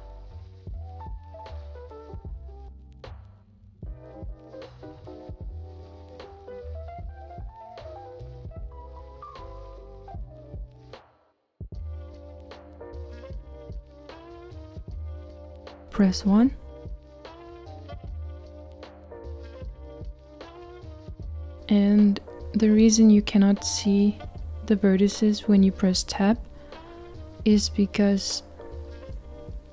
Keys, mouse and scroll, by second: 7.6-17.7 drag, 17.7 KP_1, 20.8 Tab, 21.8 Tab, 21.9 Tab, 22.0 Tab, 23.0 click, 24.4 Tab, 26.1 Tab.